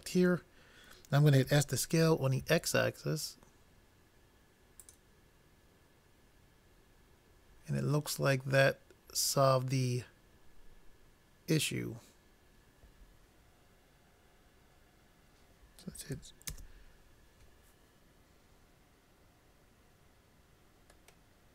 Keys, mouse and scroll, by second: 1.5 s, 16.7 shift+space, 21.3 middle click.